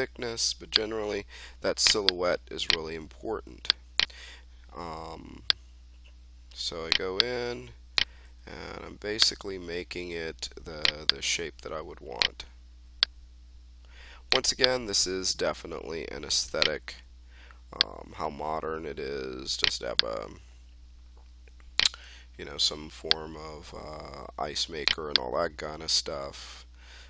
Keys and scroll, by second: 0.1 r, 8.1 e, 12.3 w, 16.7 e, 22.3 w.